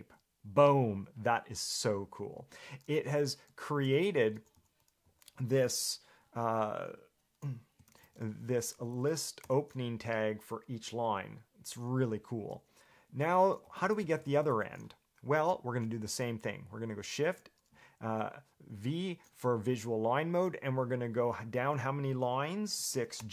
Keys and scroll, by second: 3.6-5.7 typing, 8.1 ctrl+v, 8.6-9.6 typing, 13.3 Escape, 13.8-14.7 typing, 17.4 shift+v, 22.7-23.3 typing.